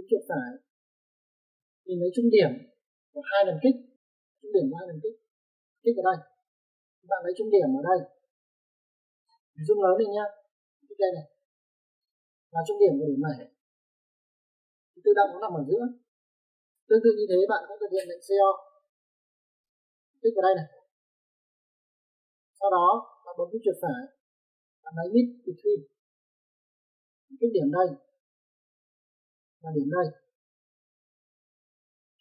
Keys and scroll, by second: 18.9-19.6 typing.